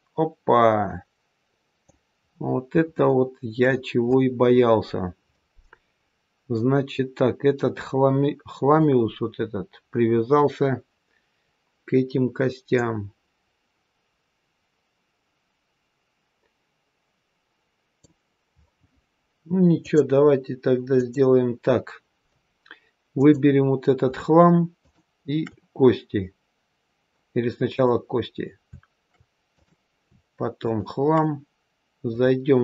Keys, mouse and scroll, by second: 2.2-2.8 scroll up 4, 2.8 shift+middle click, 6.7-8.6 scroll down 1, 11.3-12.6 scroll down 1, 12.6 click, 12.6-13.1 scroll down 1, 19.7 click, 23.0 click, 24.8 shift+click, 27.6 click, 29.5 click, 30.5 shift+click, 32.0 click.